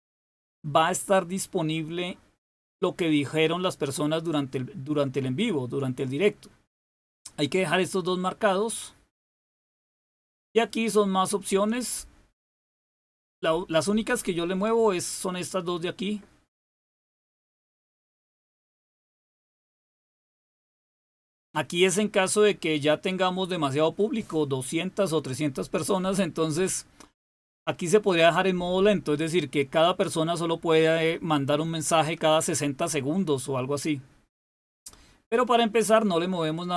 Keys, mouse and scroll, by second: 9.9-14.0 drag, 17.7-22.9 drag, 34.6-36.7 drag.